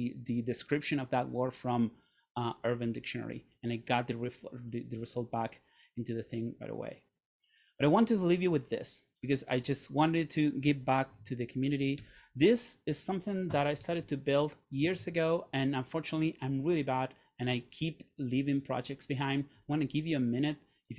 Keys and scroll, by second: 11.3 super+a, 12.1 BackSpace, 13.9 super+Tab.